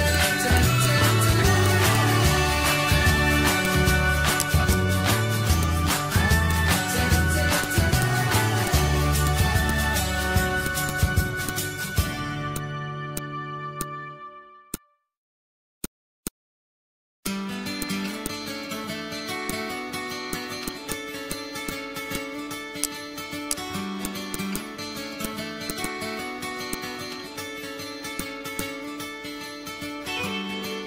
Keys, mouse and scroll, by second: 3.9 right click, 4.0 click, 7.3-11.5 drag.